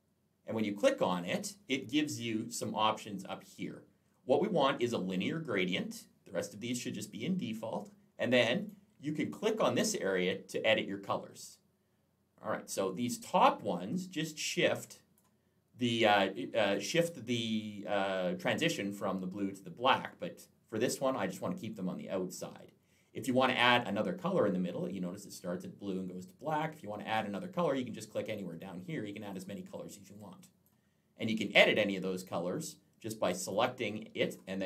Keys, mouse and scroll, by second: 0.3 click, 8.4 click, 12.8 click, 15.6 click, 20.0 click, 26.3 click, 26.9 click, 28.4 click, 29.1 click, 33.2 click, 34.1 click.